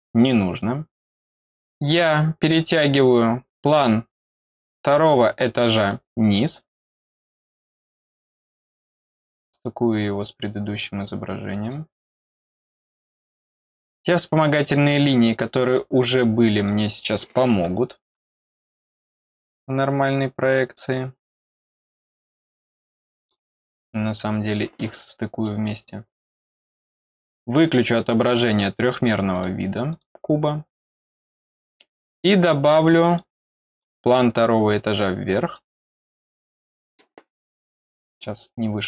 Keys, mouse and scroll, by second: 1.5-2.3 scroll up 4, 2.5 middle click, 5.8-7.0 drag, 11.6 click, 15.6 click, 16.5 click, 23.1 click, 25.0 middle click, 26.9 click, 27.1 click, 28.2 click, 29.3 click, 29.9 click, 33.0 click, 33.7 click, 34.6 click, 37.4 scroll down 1, 37.9 click, 38.1 click.